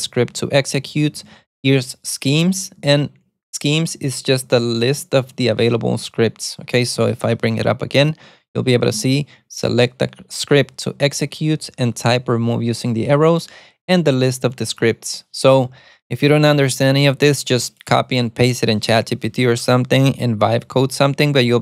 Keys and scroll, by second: 0.0-1.4 typing, 3.8 ctrl+u, 4.3-6.5 typing, 7.7 alt+super+a, 14.9 Escape.